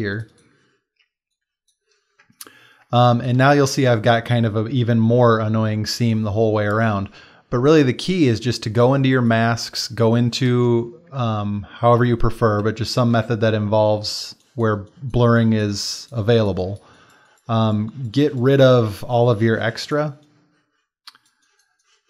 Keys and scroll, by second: 2.3 ctrl+space, 2.8 space, 12.0 b, 12.9 x, 13.1 x.